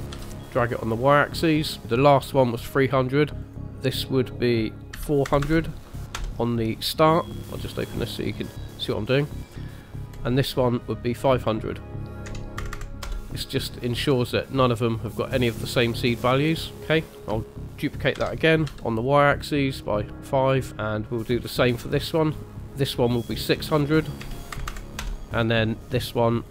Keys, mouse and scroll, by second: 3.4 click, 3.9 click, 5.4 KP_0, 7.4 click, 10.1 click, 11.4 click, 12.7 KP_0, 15.2 middle click, 16.2 middle click, 18.2 shift+d, 20.0 middle click, 22.5 click, 23.9 click, 24.7 KP_0, 26.4 click.